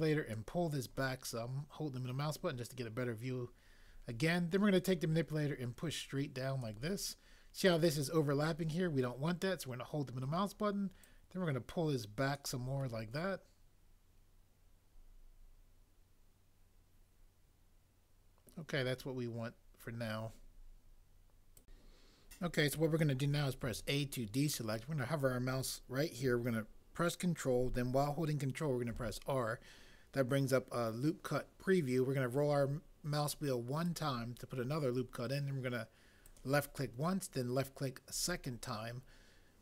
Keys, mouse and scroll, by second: 23.6 a, 28.9 ctrl+r.